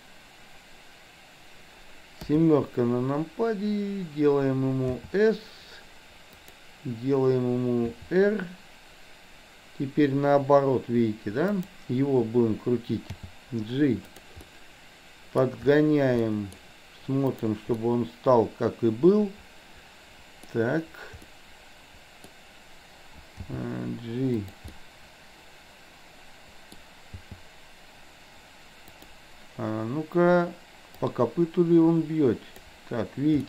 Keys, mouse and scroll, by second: 2.2 KP_7, 5.0 s, 7.8 r, 13.1 g, 14.5 scroll up 1, 14.7-15.5 middle drag, 16.3 middle click, 17.3 click, 18.0-20.5 middle drag, 20.5 scroll up 1, 21.3-22.3 middle drag, 23.5 g, 24.7-26.8 middle drag, 27.2 g, 31.1-32.8 drag.